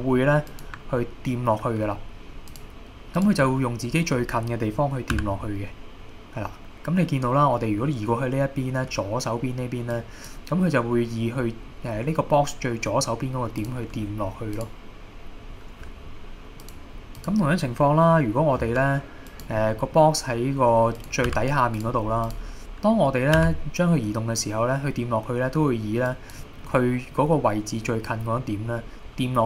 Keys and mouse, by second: 2.6-5.2 drag, 5.2 g, 9.9 click, 16.7-18.6 drag, 18.6 g, 19.3 click, 19.7 middle drag, 21.0 click, 21.3 g, 21.8 click, 22.3 click, 23.4 g, 26.1 click, 26.7-27.2 middle drag.